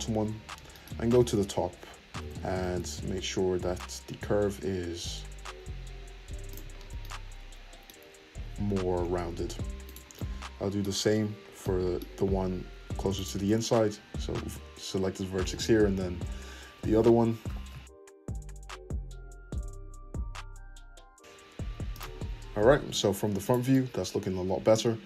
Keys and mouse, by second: 0.1 `, 2.2 g, 8.3 `, 9.8 click, 9.9-13.2 middle drag, 13.2 ctrl+click, 13.2-23.4 ctrl+middle drag, 15.4 `, 17.4 g, 20.9 shift+g, 22.5 `, 22.9 Tab, 23.4 click, 23.5-25.0 middle drag.